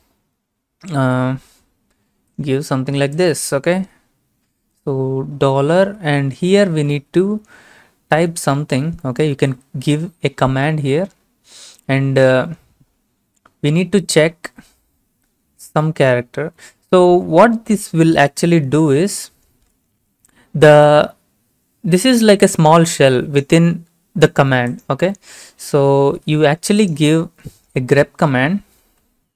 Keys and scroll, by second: 5.5-6.4 typing, 8.1-10.3 typing, 12.0 typing, 15.7-16.6 typing, 18.9 alt+Tab, 19.8 alt+shift+Tab, 26.2 alt+Tab, 28.9 t, 29.0 Left.